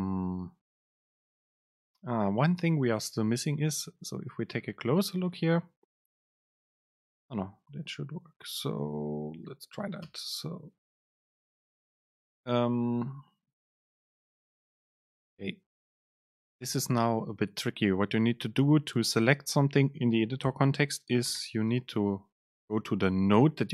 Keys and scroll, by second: 2.5 Up, 2.9 Down, 10.2 Return, 10.9 BackSpace, 13.2 super+space.